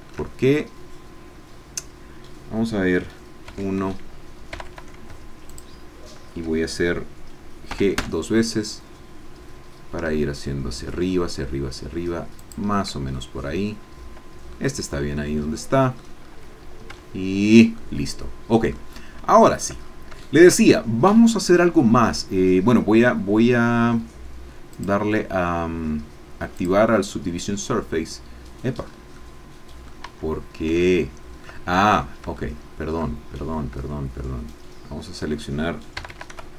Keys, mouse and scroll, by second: 3.4 1, 4.5 a, 5.1 alt+shift+a, 5.5 alt+shift+click, 7.7 g, 12.4 shift+click, 13.2 shift+middle click, 13.3-14.6 drag, 14.9-15.2 scroll down 2, 15.2 click, 16.2 scroll down 2, 17.0 Tab, 17.2 middle click, 17.8-18.9 drag, 18.9-19.2 scroll down 1, 19.3 shift+click, 19.8 shift+scroll down 1, 20.2 shift+click, 20.7 shift+scroll up 1, 24.7 click, 26.7 click, 28.8 scroll up 1, 29.1 middle click, 30.1 Tab, 30.8 shift+middle click, 31.7-32.0 shift+scroll up 1, 32.3 shift+middle click, 32.7 shift+click, 33.0-34.2 shift+middle drag, 36.1 a.